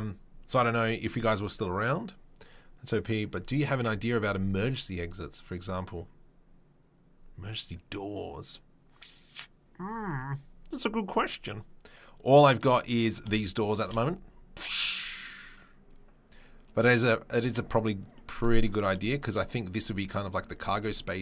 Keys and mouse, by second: 12.1-18.9 drag, 13.8 shift+space, 16.8 r, 17.4 shift+space, 18.9 shift+right click, 19.3-21.2 drag, 20.4 typing.